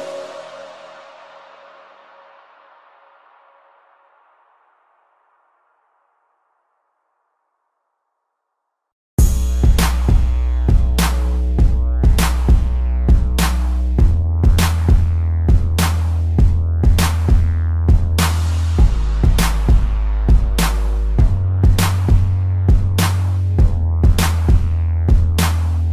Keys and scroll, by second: 4.2 a, 4.3 space, 4.9 a, 6.5-8.2 typing, 6.8 ctrl+-, 10.1 space, 11.7 space, 13.3 space, 13.4 ctrl+-, 13.6 space, 24.6 a, 25.0 space.